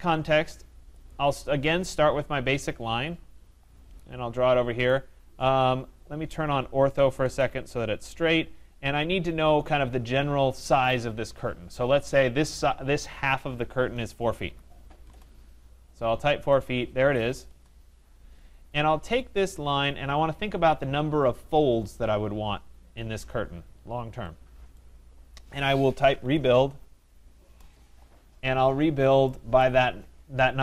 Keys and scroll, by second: 15.0 Return, 27.4 Return.